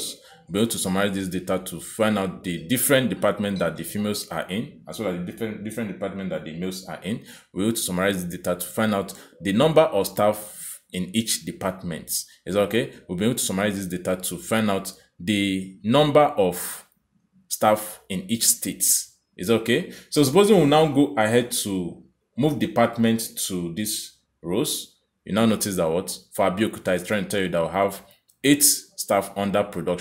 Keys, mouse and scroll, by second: 22.6 click.